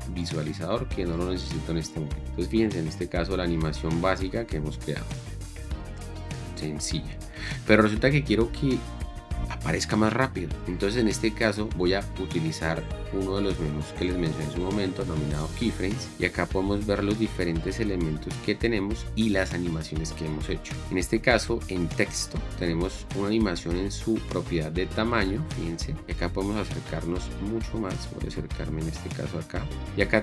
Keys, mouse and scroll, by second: 3.5 space.